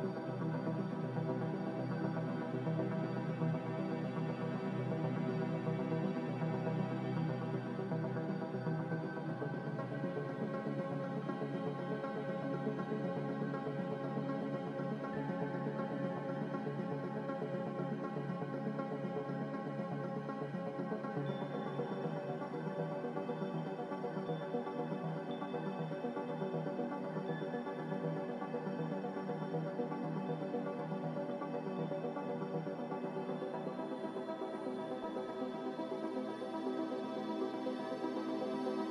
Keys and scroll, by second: 6.8 a, 12.3 ctrl+c, 12.4 ctrl+v, 18.2 ctrl+g, 25.4 n, 33.9 ctrl+z, 34.1 ctrl+z, 34.9-36.6 typing.